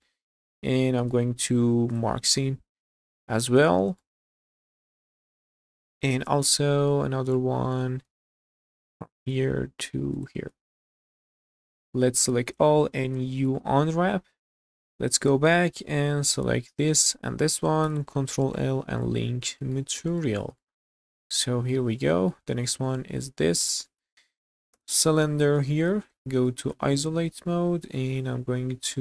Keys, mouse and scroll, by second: 0.1 middle click, 1.0 q, 2.2 scroll down 1, 2.4-3.4 middle drag, 3.6 click, 4.0 shift+middle click, 4.6 shift+middle click, 5.4 scroll down 1, 5.7-6.9 middle drag, 7.1 scroll up 1, 7.4 shift+middle click, 8.4 click, 8.9 shift+middle click, 10.1 ctrl+click, 10.5 q, 11.1 scroll down 2, 11.4 middle click, 12.2 a, 12.9 u, 14.7 /, 15.5 Tab, 16.2 click, 17.1 shift+click, 17.8 ctrl+l, 19.0 click, 19.3 scroll up 2, 19.6 shift+middle drag, 19.9 scroll up 2, 20.2 shift+middle drag, 20.6-21.7 middle drag, 21.8 scroll down 2, 22.1 shift+middle drag, 22.9 click, 23.5 scroll down 1, 23.7 shift+middle click, 24.7 /, 25.5-25.9 middle drag, 25.9 Tab, 26.2 scroll down 1, 26.5-29.0 middle drag.